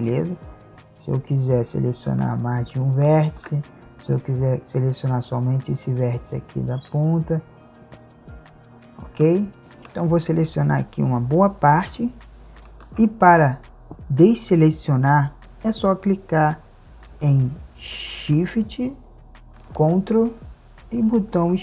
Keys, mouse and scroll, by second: 0.1-2.1 ctrl+drag, 6.1-9.6 drag, 10.1-12.2 drag, 13.3 click, 20.7 click, 21.3 ctrl+shift+e, 21.4-21.6 drag.